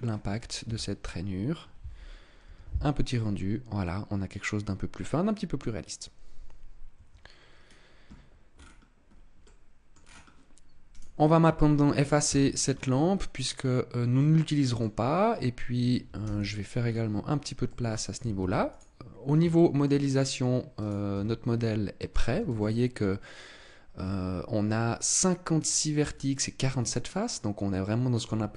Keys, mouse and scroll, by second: 0.5 KP_0, 6.8 Escape, 7.4 scroll down 3, 8.4 scroll down 4, 8.9 scroll up 2, 9.3 middle click, 9.9 scroll down 2, 10.8 right click, 12.1 x, 13.3 middle click, 16.1 t, 16.7-17.5 scroll up 3, 17.5 middle click, 18.3 ctrl+s, 19.4 shift+middle click, 20.7 right click, 21.0 Tab, 21.4 middle click, 22.1 a, 22.4 a, 23.9 Tab, 26.5 middle click, 27.5 middle click, 28.1 Tab.